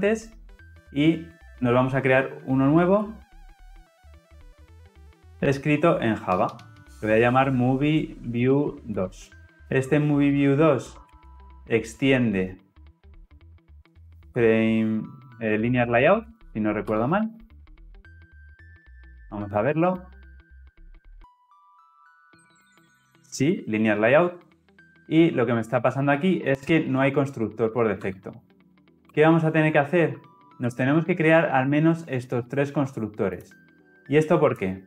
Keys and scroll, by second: 2.9 alt+Insert, 12.1 Return, 16.9 Return, 28.0 alt+Return, 30.6 shift+Down.